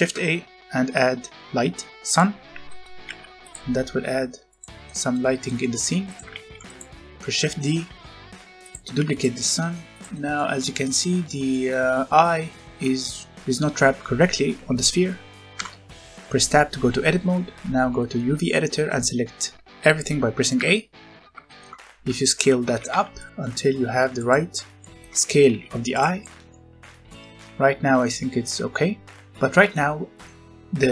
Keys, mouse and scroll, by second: 2.1 click, 2.4 scroll down 1, 2.6 middle click, 3.0 g, 3.8 r, 4.4 click, 4.6 scroll down 1, 4.8 middle click, 5.8 r, 6.0 click, 6.3 shift+d, 6.6 click, 7.7 r, 8.5 click, 8.7 g, 9.0 click, 9.3 middle click, 9.9 click, 10.1 middle click, 10.4 scroll up 1, 10.8 click, 11.4 middle click, 12.1-12.8 scroll down 1, 12.8 scroll up 1, 13.1 middle click, 15.5 Tab, 17.6 middle click, 17.7 scroll down 1, 18.0 middle click, 20.5 a, 21.4 shift+middle click, 21.8 scroll down 1, 22.2 shift+middle click, 22.8 g, 23.1 click, 24.1 click, 24.7 shift+middle click, 25.4 g, 25.8 click, 26.2 middle click, 26.8 scroll up 1, 27.0 middle click, 28.5-29.1 scroll up 1, 29.1 middle click, 29.6 middle click.